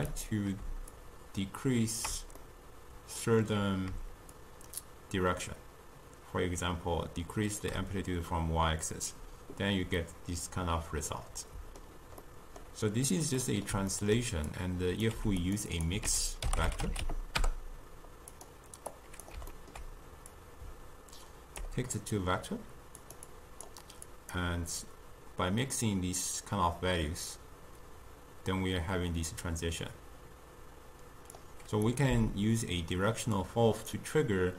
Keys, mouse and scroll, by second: 1.0-2.5 shift+drag, 2.5-4.4 middle drag, 4.4-7.4 shift+drag, 10.1-14.6 middle drag, 14.6-15.2 drag, 15.2 g, 15.8 click, 16.1 ctrl+a, 19.0 click, 19.6 ctrl+middle click, 20.4 click, 22.0-23.1 middle drag, 23.1 drag, 23.3-24.2 drag, 24.9-28.1 drag, 31.9 click, 32.1 x, 33.4-34.5 drag.